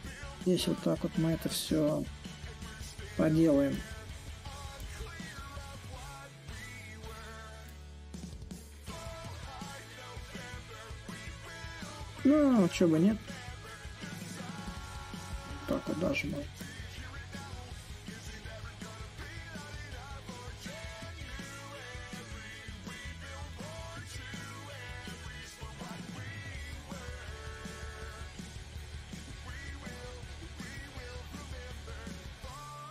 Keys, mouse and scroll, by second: 3.4-8.5 drag, 9.0-14.1 drag, 14.3-18.3 drag, 18.9 space, 23.1-25.0 middle drag, 25.6-29.1 middle drag, 29.2 alt+middle click, 29.7 middle click, 29.9-32.9 drag.